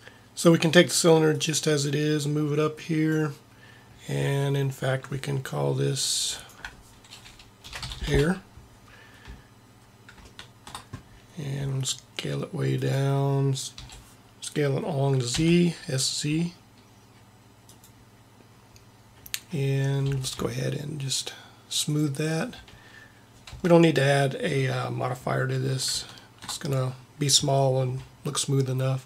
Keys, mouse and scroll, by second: 1.3-3.2 drag, 6.4-8.1 drag, 9.9 middle click, 11.6 s, 13.9 s, 18.2 middle click, 20.0 t, 21.9 click, 23.3 click, 23.7 Tab.